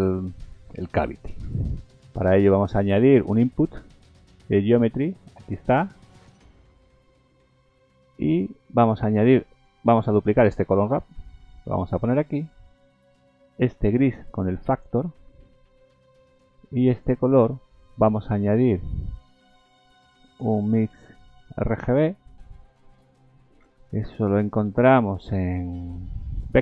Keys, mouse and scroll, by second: 1.4 shift+a, 6.6-7.5 scroll up 5, 8.0 shift+middle click, 10.1 click, 11.1 shift+d, 13.8 click, 15.7 click, 17.6-19.5 scroll down 15, 20.0 click, 21.2 click, 22.3-22.8 scroll up 6, 23.6 shift+a.